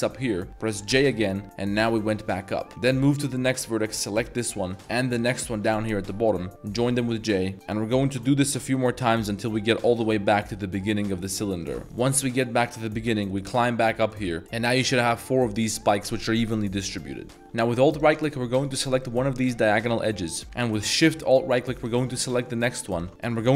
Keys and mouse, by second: 0.9 j, 1.3 middle click, 2.1 middle click, 2.8 click, 5.3 shift+click, 6.8 j, 7.3 middle drag, 7.5 ctrl+z, 8.0 shift+click, 8.4 j, 8.5-9.1 middle drag, 9.8 shift+click, 10.1 middle drag, 10.5 middle click, 11.2 drag, 11.2 j, 11.8 ctrl+z, 11.9 drag, 12.5 shift+click, 13.0 j, 13.3 middle click, 14.1 middle click, 14.3 3, 14.4 z, 14.7-16.0 middle drag, 16.7 middle click, 17.4 a, 17.9 alt+click, 19.5-19.9 middle drag, 21.8 alt+shift+click, 22.2 middle drag, 22.9 alt+shift+click, 23.1 ctrl+z, 23.1 middle click, 23.5 alt+shift+click.